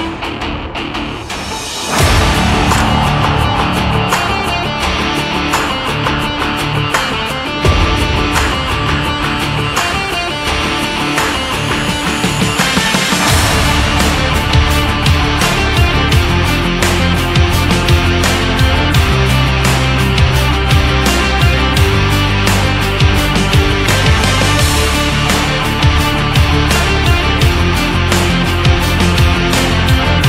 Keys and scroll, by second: 4.1 ctrl+0, 4.6 ctrl+-, 15.2 ctrl+=, 16.7 ctrl+-, 17.7 ctrl+=, 18.5 space.